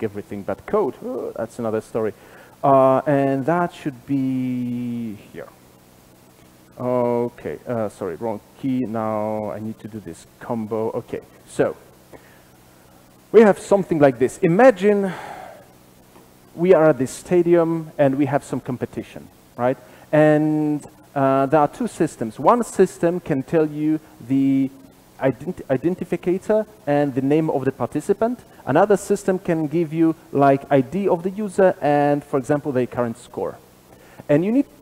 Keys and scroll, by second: 10.0 shift+F12.